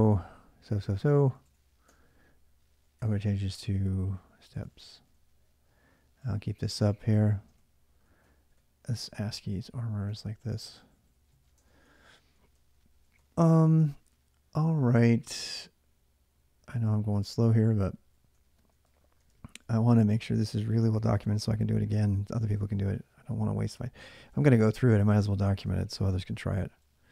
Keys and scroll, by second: 1.3 ctrl+a, 1.7 ,, 2.9-22.8 typing, 24.2 ctrl+[, 24.4-27.1 typing.